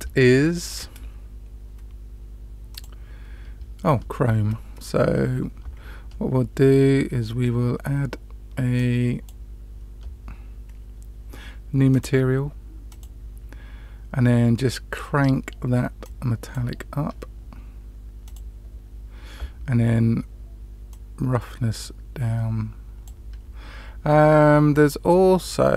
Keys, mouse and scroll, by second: 11.9 click, 12.8 click, 16.0-16.5 drag, 18.2 click, 20.8-23.0 drag, 25.0-25.7 middle drag.